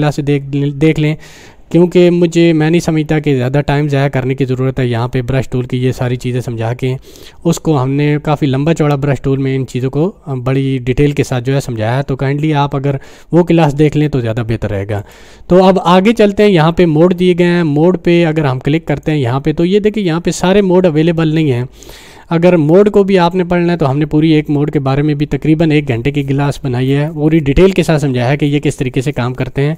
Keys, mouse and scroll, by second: 15.0 click, 18.9 click.